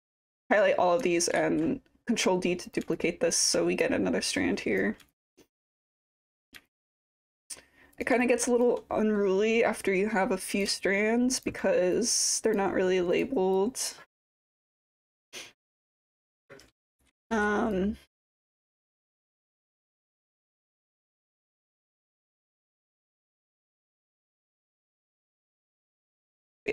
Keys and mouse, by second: 1.4 ctrl+d, 3.0 alt+click, 3.8 click, 5.1 alt+click, 5.9 click, 6.7 alt+click, 7.9 click, 8.2 alt+click, 9.8 click, 10.8 alt+click, 12.0 click, 13.1 click, 13.6-14.7 drag, 14.9 alt+click, 15.5 middle click, 16.0 click, 16.9-17.3 typing, 17.8 click, 18.3-19.8 typing, 18.8 click, 19.8 click, 20.8 alt+click, 21.7 alt+click, 22.6 click, 23.9 click, 25.2-26.7 alt+drag.